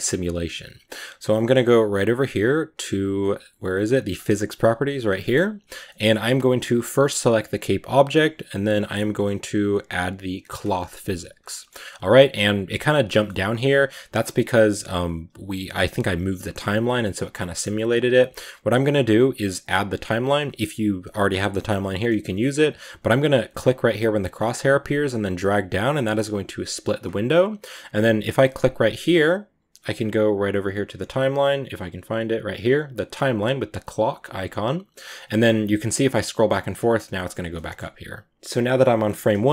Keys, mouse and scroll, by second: 6.0-6.6 scroll up 3, 6.6 right click, 6.8-10.8 middle drag, 10.8 click, 11.4-25.1 middle drag, 25.1-37.4 drag, 37.4-39.5 middle drag.